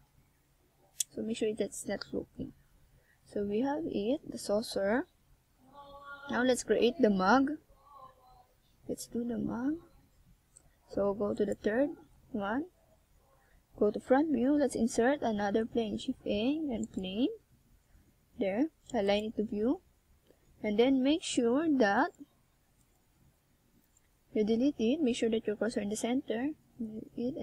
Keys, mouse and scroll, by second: 3.9-5.1 scroll down 4, 5.1 click, 6.2 Tab, 6.5 middle click, 8.8 KP_1, 9.9-10.3 scroll down 3, 11.2 middle click, 13.2 KP_7, 14.6 Tab, 15.3 scroll up 1, 19.8 r, 22.8 click, 23.5 Tab, 24.7 KP_3, 25.8 Tab, 26.9 a.